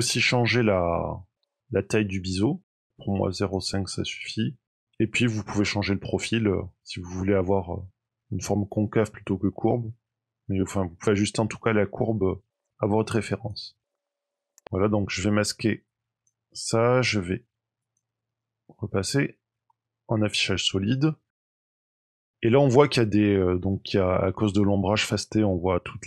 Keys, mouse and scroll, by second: 0.6 click, 5.3 click, 13.8 scroll down 4, 13.9 middle click, 14.4 Tab, 15.8 click, 17.7 click, 18.6 middle click, 21.0 middle click, 21.6 shift+middle click, 23.2 middle click.